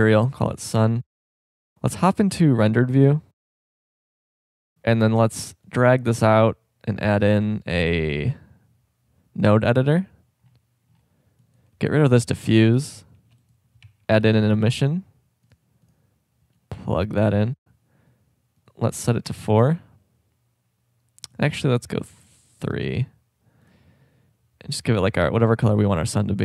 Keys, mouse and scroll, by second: 0.5-1.6 drag, 2.2-4.2 drag, 5.7 click, 11.3-12.6 drag, 12.3 Delete, 13.1 shift+a, 16.7-18.4 drag, 18.6-20.4 drag, 21.3 click, 22.1 click, 23.7-25.2 drag.